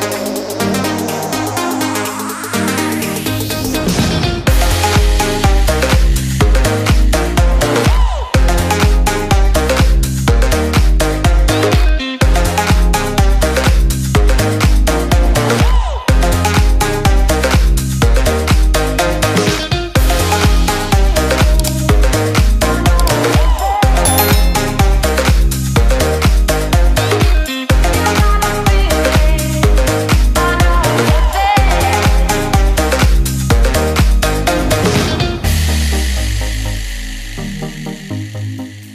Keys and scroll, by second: 1.1 ctrl+space, 2.2 ctrl+space, 3.4 ctrl+y, 3.7 ctrl+shift+], 4.0 ctrl+space, 5.1 ctrl+x, 5.7 ctrl+v, 6.8 alt+Right, 7.6 ctrl+space, 10.4 ctrl+space, 11.2 alt+Right, 11.8 ctrl+space, 13.5 ctrl+space, 17.7 ctrl+0, 17.9 ctrl+space.